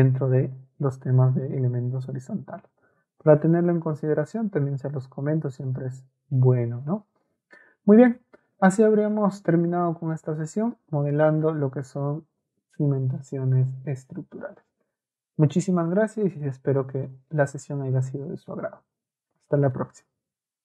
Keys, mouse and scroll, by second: 16.2 scroll up 2.